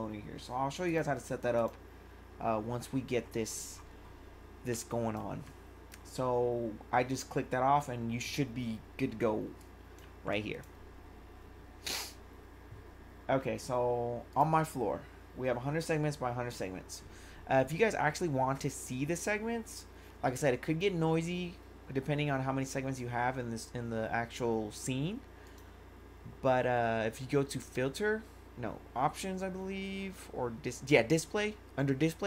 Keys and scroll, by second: 4.7 1, 9.5 1.